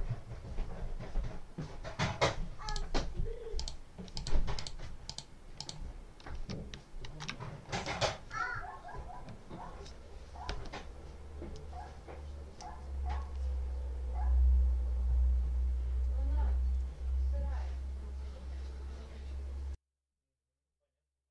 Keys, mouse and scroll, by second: 2.6 click, 3.4 click, 4.0 click, 4.4 click, 5.0 click, 5.4 click, 6.9 ctrl+s, 7.8 right click.